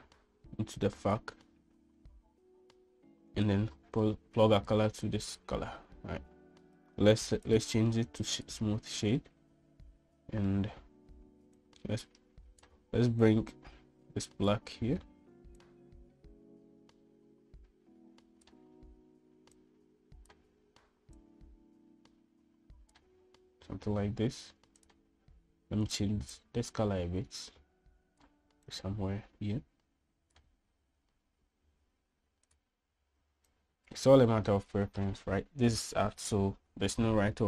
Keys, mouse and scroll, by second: 0.5-2.0 drag, 4.3-5.5 drag, 8.3-9.3 drag, 12.4-13.6 drag, 14.1-15.3 drag, 16.5-19.3 drag, 20.4-21.1 drag, 22.1-22.5 drag, 22.5 right click, 25.6 right click, 26.7 right drag, 33.3 click.